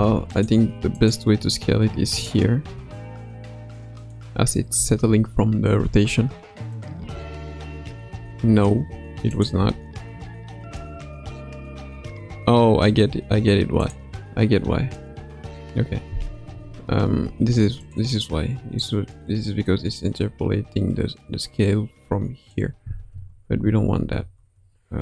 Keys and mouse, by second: 0.9 click, 2.1 click, 2.6 s, 4.7 a, 5.7 i, 6.7 click, 7.0 space, 8.1 space, 9.3 click, 9.6 space, 10.7 space, 13.7 click, 16.7 ctrl+z, 17.8 click, 18.7-22.5 drag, 23.2 ctrl+z, 23.5 ctrl+z, 24.1 ctrl+z.